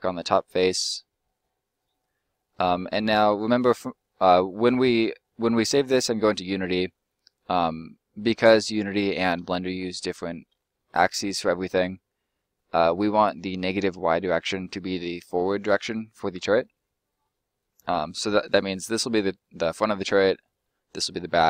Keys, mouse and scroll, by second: 4.0 middle click, 6.0 scroll down 1, 6.0 middle click, 9.8-10.2 scroll up 2, 10.2 shift+middle click, 18.7 right click, 19.1 middle click, 20.8 right click, 21.1 middle click.